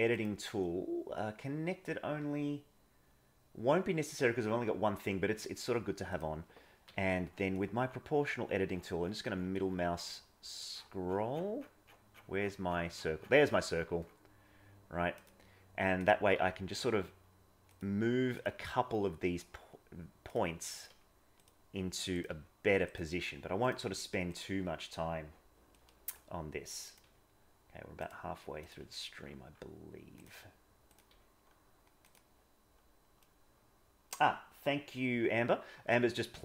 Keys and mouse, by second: 0.1-5.3 drag, 6.1 click, 6.8 g, 16.3 g, 18.3 click, 18.5 g, 20.7 click, 22.1 click, 23.6 click, 25.7 middle click, 28.8 g, 30.8 click, 33.1-34.2 middle drag, 36.0 middle click.